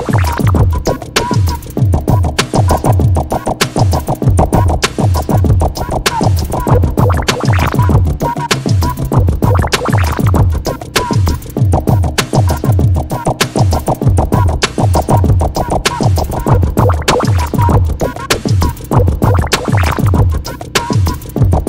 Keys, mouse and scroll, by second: 1.8 scroll down 1, 2.1-3.1 drag, 3.4-3.8 scroll down 1, 3.8-5.1 drag, 5.4-5.9 scroll down 1, 5.9 click, 6.8-7.3 scroll up 1, 8.4 click, 9.6 scroll up 1, 9.8-10.2 scroll down 1, 11.0 shift+click, 11.2 scroll up 1, 12.0-14.6 drag, 14.8 p, 15.1 click, 15.9 p, 16.1 scroll up 1, 17.0-19.6 drag, 19.6 scroll up 1, 20.5 p, 20.8 click.